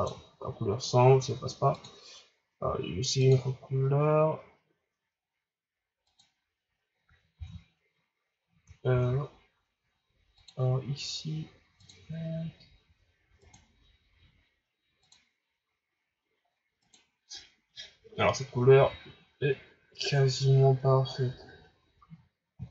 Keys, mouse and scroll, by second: 1.8 drag, 8.9 ctrl+z, 10.4 click, 18.7 a, 19.1-20.0 scroll down 2, 20.0-21.7 scroll up 1, 21.7-22.4 scroll up 1.